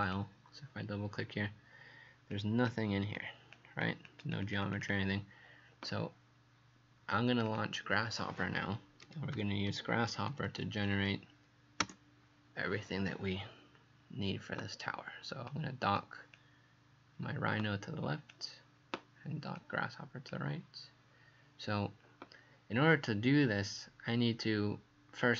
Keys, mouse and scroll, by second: 11.8 Return, 15.5 click.